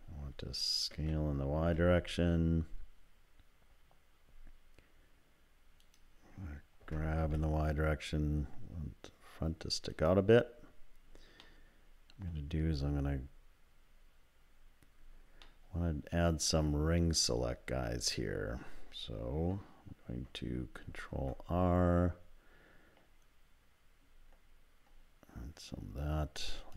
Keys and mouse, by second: 0.9 s, 6.8 g, 11.5 middle click, 15.6-17.1 middle drag, 20.8 ctrl+r.